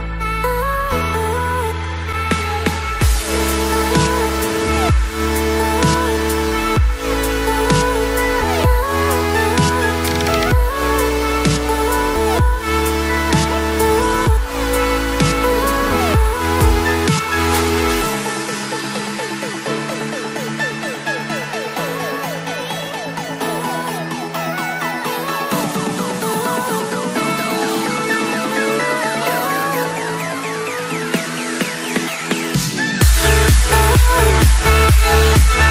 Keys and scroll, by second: 16.5 ctrl+g.